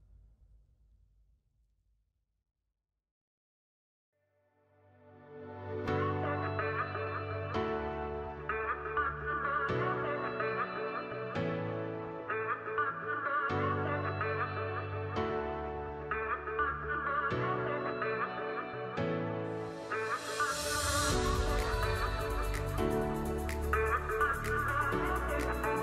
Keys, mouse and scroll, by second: 19.0 space, 20.4 super+scroll up 1, 21.2 space, 21.8 alt+scroll up 1, 22.9 alt+scroll down 1, 23.0 alt+scroll up 1, 23.2 alt+scroll down 1.